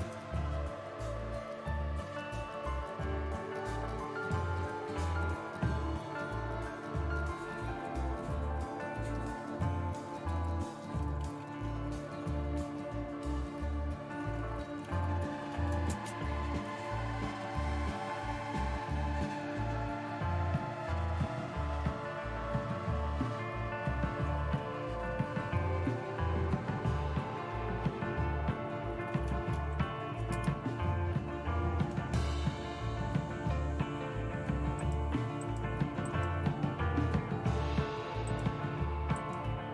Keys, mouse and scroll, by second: 0.0 super+Return, 5.8 super+", 7.6 super+2, 12.6 typing, 14.9-16.5 typing, 16.7 Return, 19.2 super+3, 32.3-33.0 typing, 35.4 click, 36.5-39.7 drag.